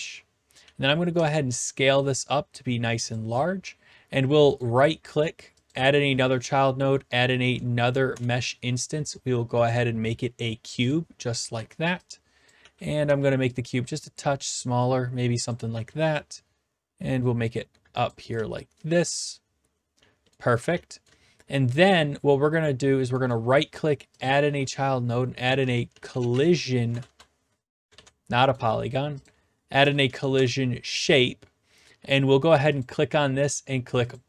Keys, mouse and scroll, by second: 0.6-1.1 typing, 3.1-4.2 drag, 4.6 right click, 5.7 click, 8.1 Return, 9.7-10.8 drag, 10.9-11.9 drag, 11.6-13.6 typing, 12.5 click, 15.5 click, 15.7 w, 18.0 click, 18.3-21.1 typing, 20.3 right click, 21.0 right click, 22.0 click, 23.3 right click, 24.2 click, 25.2-26.9 typing, 27.0 Return, 28.0 ctrl+z, 28.5 right click, 29.2 click, 30.1 Down, 30.3 Return, 32.8-33.9 drag, 34.1-34.2 drag.